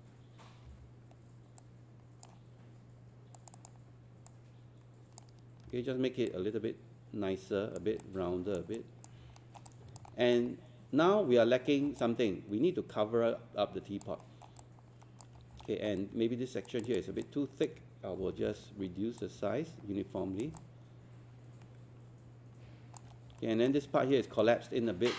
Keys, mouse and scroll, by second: 0.7 e, 1.6-5.5 drag, 5.7 w, 6.3-7.9 drag, 8.0 alt+click, 8.8 alt+click, 9.4 alt+middle click, 10.1 alt+middle click, 10.5-11.0 scroll up 1, 11.8 scroll down 1, 12.0-14.0 alt+drag, 14.2 alt+middle click, 14.6 alt+click, 15.4 scroll up 1, 15.7 alt+middle click, 16.7 click, 17.3 alt+click, 18.2 alt+e, 19.2-20.5 drag, 20.6-23.0 alt+drag, 23.2 scroll up 1, 23.4 alt+middle click, 24.4 right click.